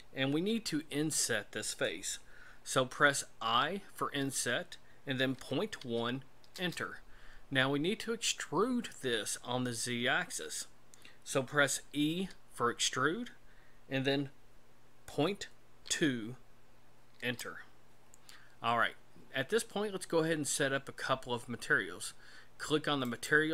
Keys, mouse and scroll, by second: 12.1 e, 23.0 click.